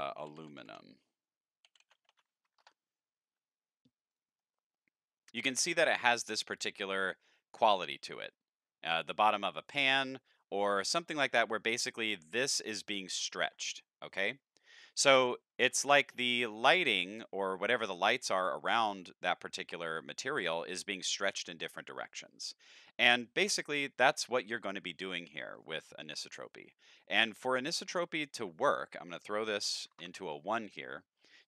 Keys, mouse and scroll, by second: 0.0-0.6 typing, 1.7 i, 2.6 Return, 4.1 click, 25.6 click, 27.6 middle click, 28.7 click, 29.6 End, 29.8 KP_Decimal, 29.9 KP_0.